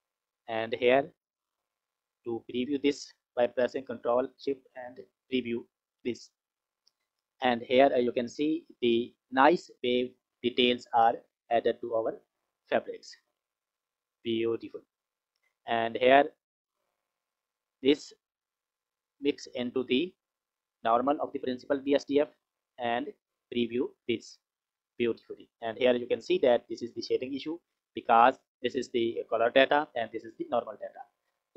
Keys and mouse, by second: 1.3-1.9 drag, 2.4 click, 4.0 ctrl+shift+click, 6.5 F6, 15.8 middle click, 16.4 middle click, 17.2 middle click, 18.3-21.0 drag, 21.7 click, 23.1 ctrl+shift+click, 30.9 click.